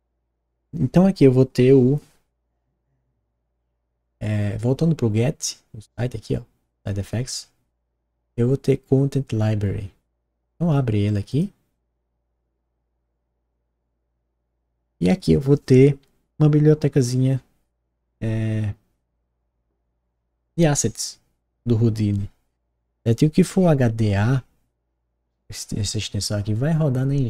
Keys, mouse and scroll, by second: 11.3 click.